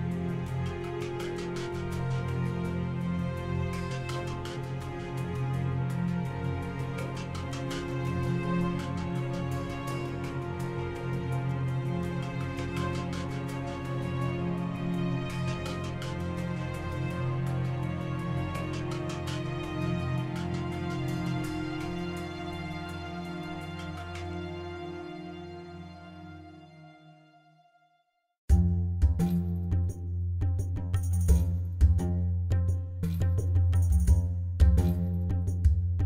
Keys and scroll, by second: 3.0 g, 3.4 z, 6.7 7, 7.9 g, 9.3 shift+d, 12.1 g, 12.5 z, 14.6 shift+a, 15.8 Tab, 16.3 s, 16.6 1, 16.8 5, 17.1 Return, 18.4 Tab.